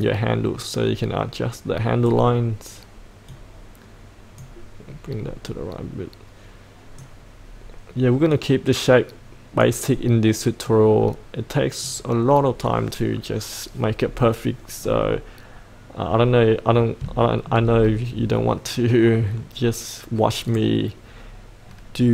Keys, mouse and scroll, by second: 16.1-17.0 scroll up 1, 17.2 shift+middle click, 20.4-21.4 drag.